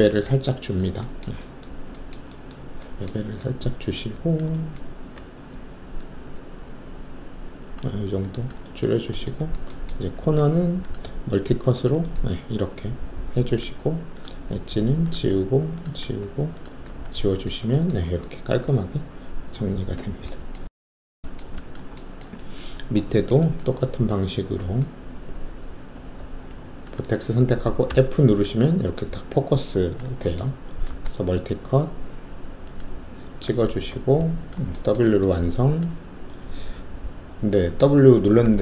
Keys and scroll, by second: 10.1 alt+s, 13.2 w, 14.5 alt+q, 15.3 alt+q, 17.2 alt+q, 26.1 alt+1, 27.8 f, 30.8 alt+s, 33.4 w, 37.9-38.4 typing.